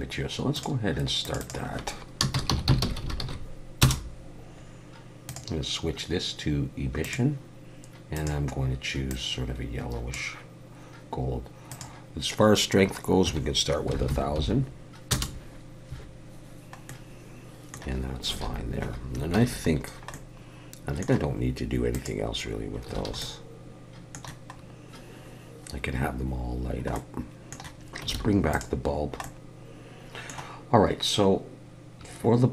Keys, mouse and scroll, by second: 0.5 click, 1.2 click, 1.4 click, 3.0 s, 5.3 click, 8.1 click, 11.7 click, 14.1 0, 16.9 middle click, 18.3 alt+a, 19.4 ctrl+s, 19.8 scroll down 1, 20.1 middle click, 21.9 click, 22.5-22.9 scroll down 1, 23.0 alt+a, 23.2 middle click, 24.8 scroll up 1, 26.6 scroll down 1, 26.9 middle click, 27.9 alt+h, 28.1 alt+a, 28.5 click, 28.9 scroll down 2, 29.2 middle click, 32.0-32.3 scroll down 3.